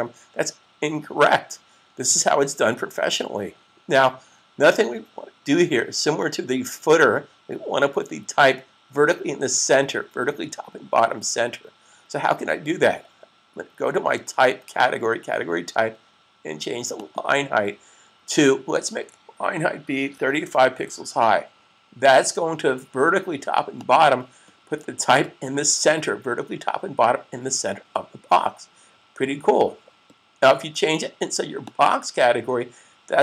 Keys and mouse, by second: 14.5 click, 20.2-21.0 typing, 23.6 click, 31.4 click.